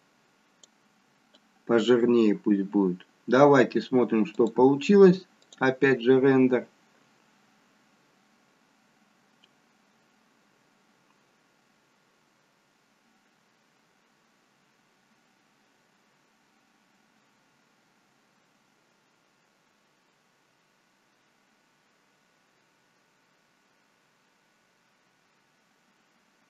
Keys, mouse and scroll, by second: 4.4 click.